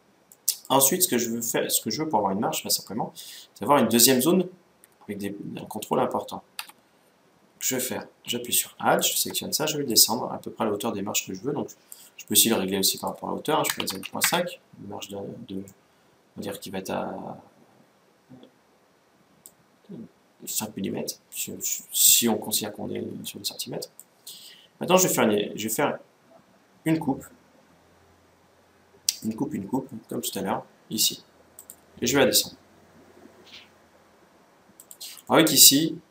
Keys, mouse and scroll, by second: 0.0-2.0 middle drag, 2.0-2.7 scroll up 1, 6.3 a, 8.7-10.5 right drag, 9.6-11.4 drag, 12.7-14.5 drag, 15.4-17.1 middle drag, 20.7-22.5 scroll up 1, 21.3-22.5 middle drag, 22.5 scroll up 1, 22.6-23.0 scroll down 1, 23.0-24.7 middle drag, 29.9-31.8 drag, 35.0-36.1 middle drag.